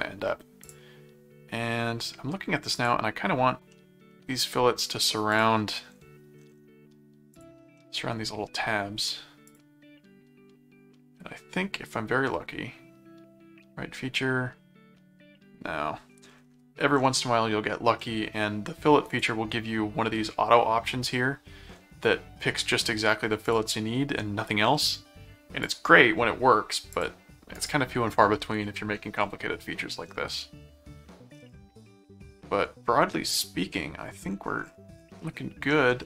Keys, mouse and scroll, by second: 0.6 click, 2.7 click, 3.7 middle click, 5.3 click, 7.3 click, 7.7 middle click, 9.4 click, 19.1 click, 23.4 click, 25.6 click, 26.9 click, 27.5 right click, 30.4 middle click, 31.9-33.0 middle drag, 35.2 middle click.